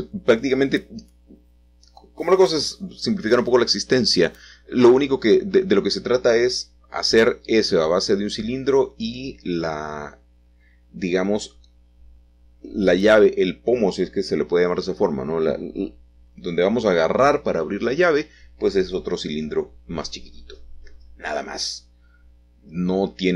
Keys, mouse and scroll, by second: 0.6 g, 1.1 x, 2.5 click, 3.6 g, 4.2 y, 5.7-6.8 drag, 7.9 3, 9.0-10.0 drag, 12.6 g, 13.5 y, 17.2 click, 17.8-19.7 shift+middle drag, 20.7 l, 22.5 shift+d, 23.1 Escape.